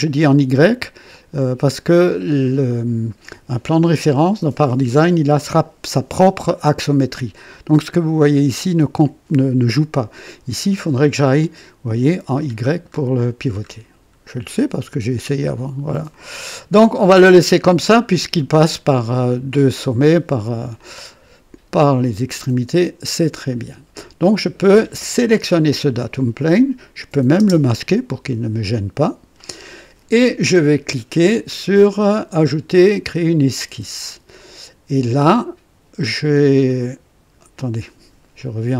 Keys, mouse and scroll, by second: 1.1-1.9 drag, 11.3 click, 12.2-13.2 scroll down 3, 13.6 scroll up 2, 14.1-14.5 scroll up 2, 14.8 scroll up 2, 16.1 click, 17.3-18.2 drag, 18.6 click, 20.7-23.3 drag, 23.5 click, 25.4 click, 27.3 space, 33.5 click, 36.3 click.